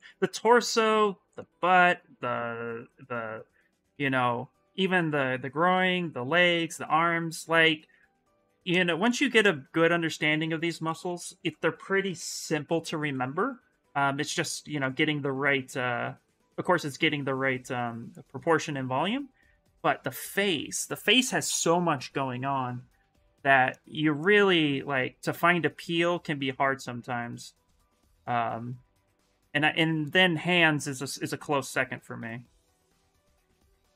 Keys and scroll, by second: 10.6 ctrl+z, 10.8 ctrl+z, 11.6-12.9 typing, 33.1 ctrl+z.